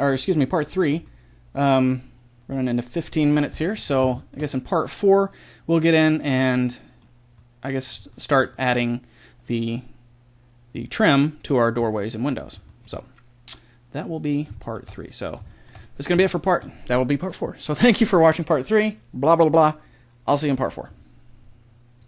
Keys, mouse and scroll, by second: 5.7 middle click, 7.5-12.3 middle drag, 13.3-15.7 middle drag, 15.9 middle click.